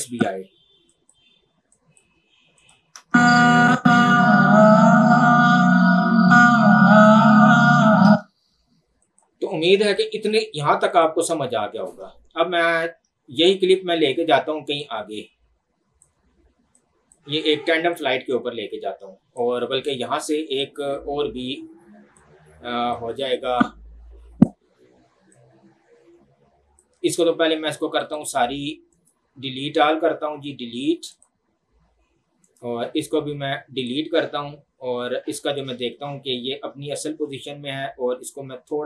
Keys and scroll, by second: 3.0 space, 8.1 space.